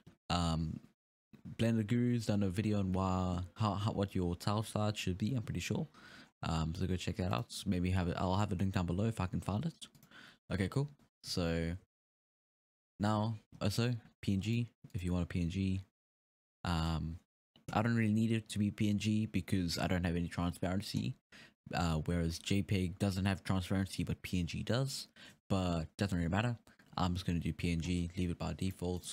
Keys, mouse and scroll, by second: 4.8-5.4 scroll up 7, 6.2-7.3 scroll up 2, 7.3 click, 10.0-13.7 drag, 11.9 z, 13.7-14.4 scroll down 3, 13.7 z, 14.4-15.0 drag, 15.3-15.6 scroll down 1, 16.3-16.8 scroll down 5, 16.8 alt+a, 17.1-19.3 scroll up 2, 19.7-21.2 scroll down 1, 21.2-22.8 scroll down 4, 28.6-29.1 drag.